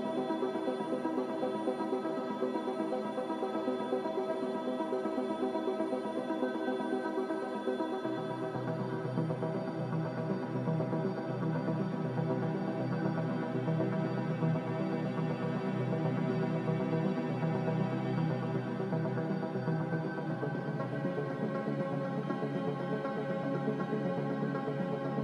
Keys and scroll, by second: 6.0 a, 15.4 a.